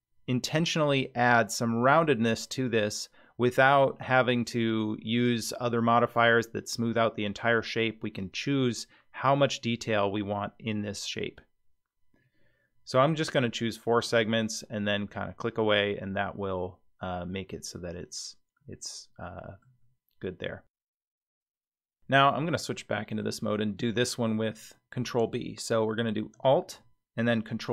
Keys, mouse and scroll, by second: 14.0 click, 15.1-15.7 middle drag, 18.6-19.6 middle drag, 19.8-20.1 scroll down 3, 22.7 click, 23.9 click, 26.3 alt+click, 27.5 ctrl+b.